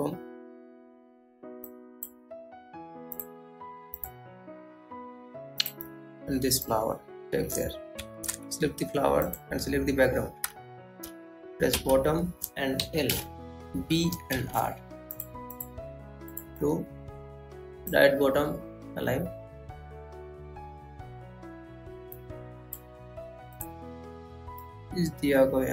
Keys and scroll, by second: 1.7 Right, 19.1 ctrl+Home.